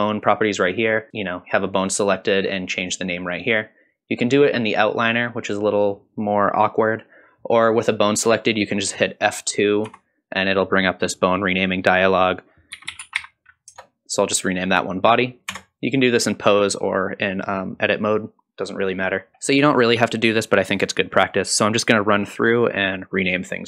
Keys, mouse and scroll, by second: 0.2 click, 7.5-9.9 scroll up 2, 9.9 F2, 15.5 Tab, 19.3 shift+middle click, 19.3-19.8 scroll down 2, 20.2 click, 20.4 F2, 20.7 click, 20.9 F2, 21.5 click, 21.6 F2, 22.1 click, 22.3 F2, 22.8 click, 23.0 F2.